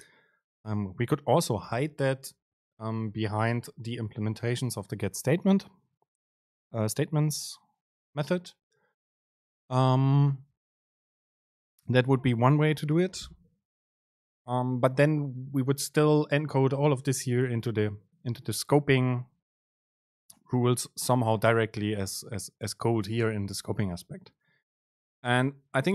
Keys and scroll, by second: 1.9 super+b.